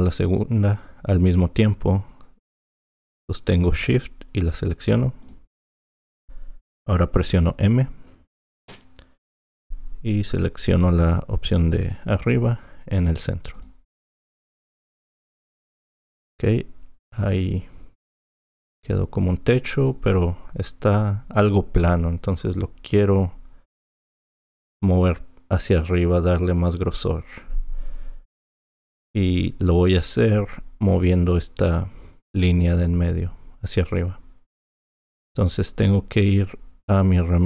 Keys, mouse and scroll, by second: 5.2 shift+click, 8.7 m, 14.7 click, 28.3 click, 34.0 click.